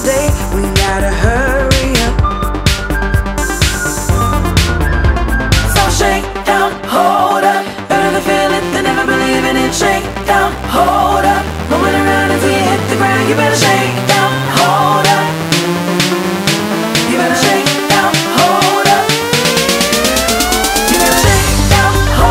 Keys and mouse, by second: 3.3 right click, 4.0 click, 11.4 click, 15.7 click, 16.4 ctrl+d, 17.5 ctrl+d, 17.6 click, 18.7 Delete, 19.7 Delete, 19.8 click, 20.2 Delete, 21.7 click.